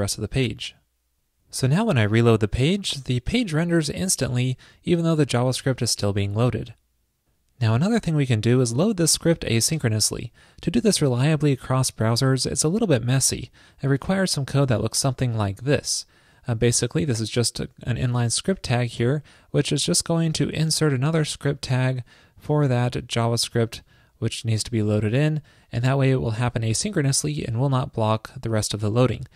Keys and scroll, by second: 15.0 super+v.